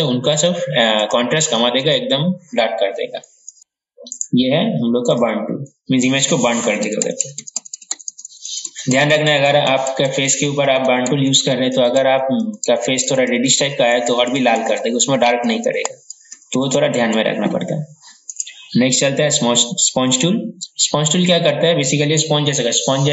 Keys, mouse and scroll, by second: 4.3 right click, 5.5 click, 6.2 ctrl+z, 6.5-9.1 typing, 18.4 right click, 20.1-23.1 drag.